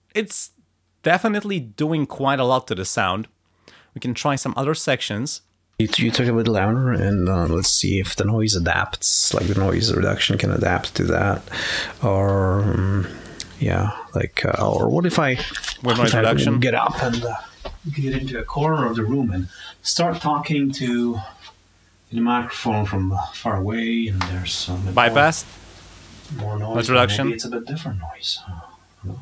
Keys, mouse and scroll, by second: 3.1 click, 5.2 click, 5.7 space, 9.1 click, 13.7 click, 24.0 click, 26.2 click.